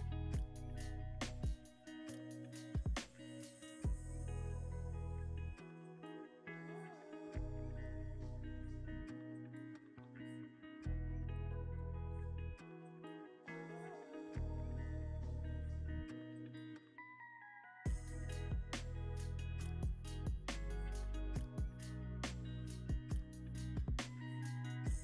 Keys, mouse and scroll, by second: 1.0-1.4 scroll up 1, 1.4 middle click, 1.9 g, 2.0 z, 5.3 middle click, 6.4 g, 6.6 x, 9.6 x, 10.7 middle click, 11.3-11.7 scroll down 1, 11.7 middle click, 12.4 g, 12.7 x, 14.6 y, 16.2 z, 17.3-22.6 drag, 17.5 right click, 17.7 ctrl+z, 18.5 g, 19.7 r, 19.8 z, 21.3 g, 21.5 x, 23.6 middle click, 24.2 g, 24.4 y.